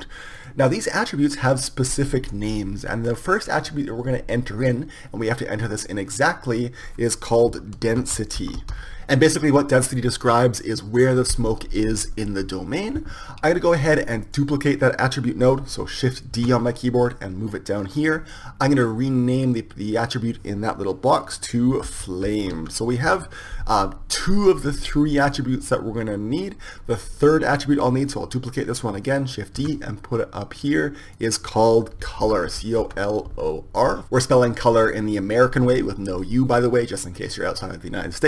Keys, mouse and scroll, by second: 6.8-8.7 drag, 15.1-17.2 drag, 17.2 shift+d, 20.3-22.2 drag, 30.6 shift+d, 32.2-33.9 drag.